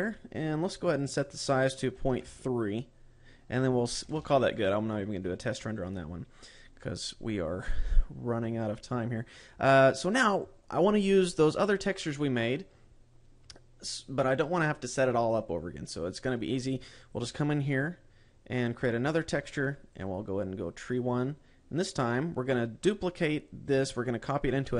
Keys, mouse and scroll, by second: 1.4 click, 4.6 ctrl+s, 6.1-8.6 scroll up 10, 8.6-10.4 scroll up 11, 17.5 click, 19.2 click, 20.4 click.